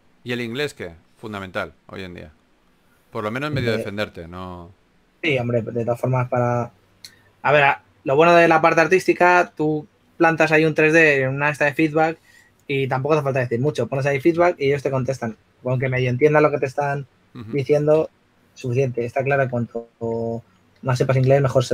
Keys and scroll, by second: 0.0-1.1 typing, 3.0-4.0 typing, 16.0-16.8 typing, 21.3-21.7 typing.